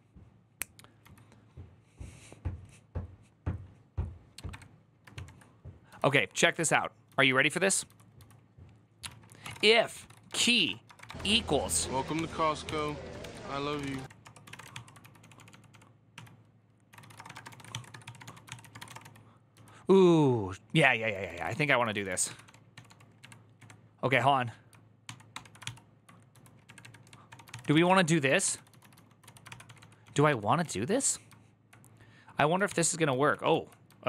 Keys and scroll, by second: 0.8 typing, 7.6-23.9 typing, 24.8 ctrl+v, 25.1 ctrl+d, 25.2-30.9 typing, 32.4 ctrl+c, 32.5 ctrl+u.